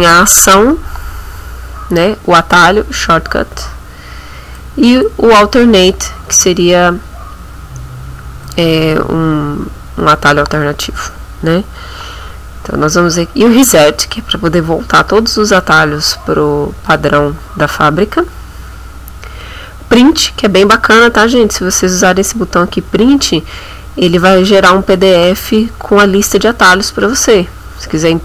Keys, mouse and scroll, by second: 4.6 click, 8.5 click.